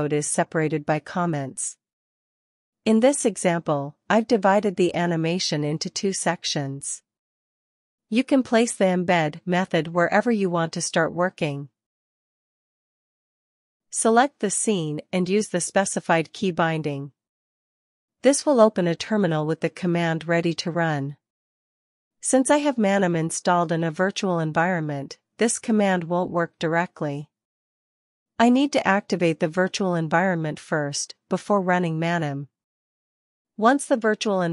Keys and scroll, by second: 16.9 shift+super+r, 27.4 Return, 28.5-30.7 typing, 34.0-34.5 typing.